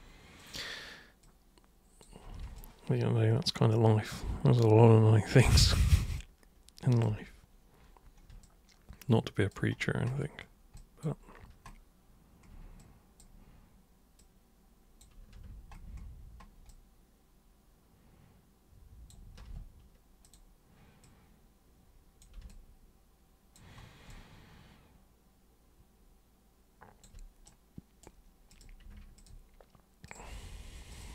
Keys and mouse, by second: 0.4 super+click, 1.2 super+click, 2.6-5.4 alt+super+drag, 6.2 alt+super+click, 8.4-9.5 alt+super+drag, 10.8 alt+super+click, 12.8-13.2 super+drag, 14.2 super+click, 16.7-19.1 alt+super+drag, 20.2 super+click, 21.0 super+click, 22.5-23.5 alt+super+drag, 24.1-27.0 alt+super+drag, 27.5 super+right click, 28.5 super+click, 29.1 ctrl+shift+super+click, 30.1 ctrl+shift+super+click, 30.9 ctrl+shift+super+click.